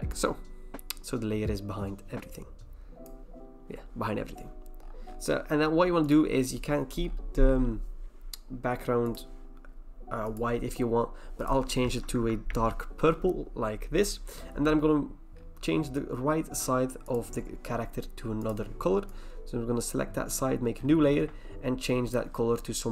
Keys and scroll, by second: 12.1 alt+BackSpace.